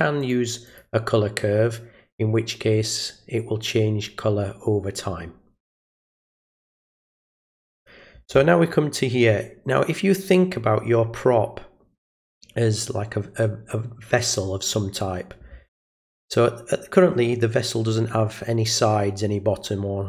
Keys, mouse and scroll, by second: 0.2 click, 0.7 click, 6.1 click, 6.8 click.